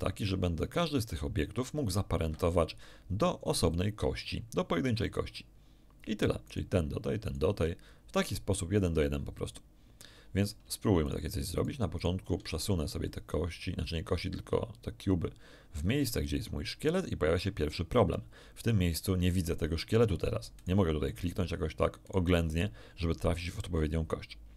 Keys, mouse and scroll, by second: 0.8 g, 2.2 Escape, 3.5 right click, 6.4 right click, 7.2 right click, 10.4 shift+right click, 11.0 shift+right click, 11.5 shift+right click, 11.9 shift+right click, 13.0-16.6 shift+drag, 18.3 scroll up 2, 18.8 shift+middle click, 20.5 right click, 21.1 right click, 22.0 right click.